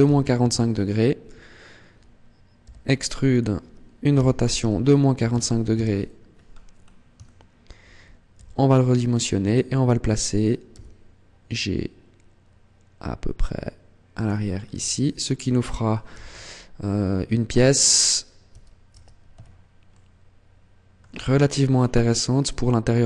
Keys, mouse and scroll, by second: 2.4 e, 3.1 click, 3.9 r, 6.1-7.0 scroll up 3, 7.0 shift+middle click, 8.3 s, 9.3 click, 10.5 g, 14.0 click, 14.2-14.6 scroll down 5, 14.6 Tab, 15.0 scroll down 1, 15.5-15.9 scroll up 2, 15.9 z, 17.3 Tab, 18.3 Tab, 18.7 Tab, 19.1 a, 19.7 middle click, 20.9-21.7 scroll down 9, 21.9 middle click.